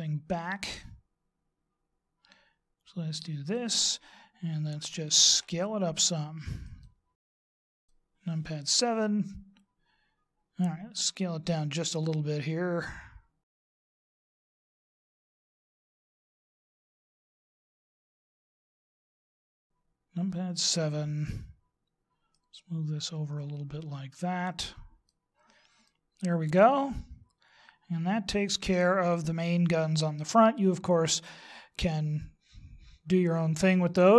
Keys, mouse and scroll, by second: 0.5 click, 5.3 s, 7.3 click, 8.6 KP_7, 13.5 click, 13.8 s, 14.7 click, 15.1 s, 16.4 click, 16.7 s, 17.3 middle click, 18.2 middle click, 19.1 s, 20.6 KP_7, 22.4 click, 25.8 middle click.